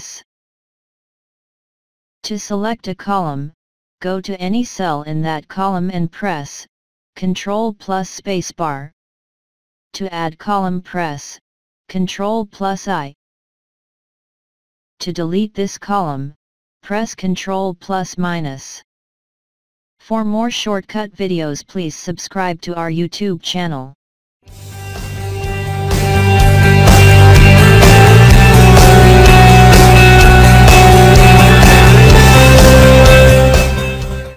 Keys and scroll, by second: 0.4 ctrl+-, 8.1 ctrl+space, 13.7 i, 18.7 ctrl+-.